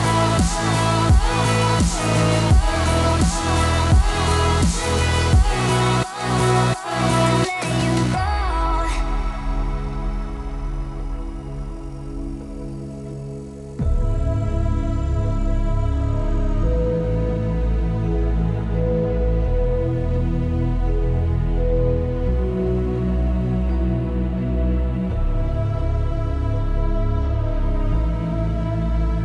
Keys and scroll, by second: 10.8 t, 13.0 t.